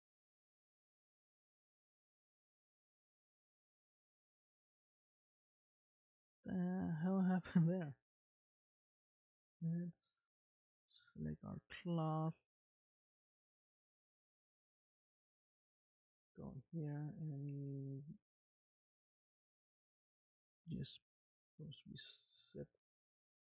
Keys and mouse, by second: 6.4 space, 11.8 ctrl+Tab, 18.4 click, 19.5 click, 20.5 middle click.